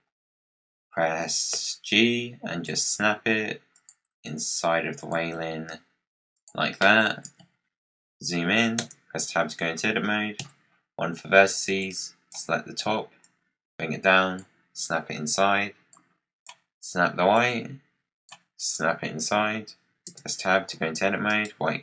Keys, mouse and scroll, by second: 0.2-0.5 scroll up 2, 0.5 scroll down 2, 1.4 g, 2.9 g, 4.0 g, 5.3 g, 7.1 KP_Decimal, 8.7 Tab, 10.3 1, 11.0-11.4 scroll down 4, 11.7 click, 13.1 click, 15.8 click, 17.2 click, 20.0 Tab, 21.2-21.8 right drag.